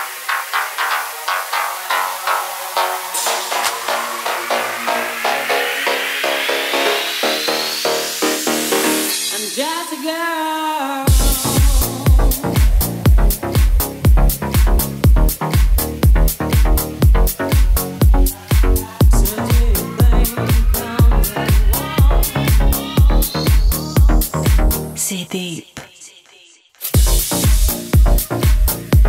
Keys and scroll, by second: 6.6 shift+b, 6.8 space, 6.9 1, 7.2 Return, 14.0 2, 14.2 Return, 14.9 super+s, 16.9 Escape, 23.8 Left, 24.2 Right, 25.1 super+c, 25.3 super+v, 27.0 0, 27.1 Return.